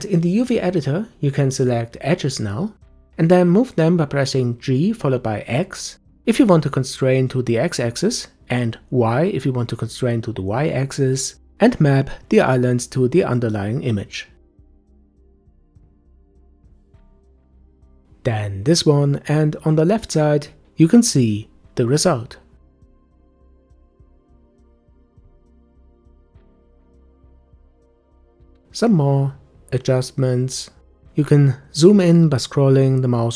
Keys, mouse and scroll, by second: 1.7 click, 2.8 click, 6.8 click, 10.2 g, 17.6 click, 20.0 g, 24.4-25.2 scroll up 1, 25.2 scroll up 1, 25.5-27.3 shift+middle drag, 27.3 click, 29.6 g.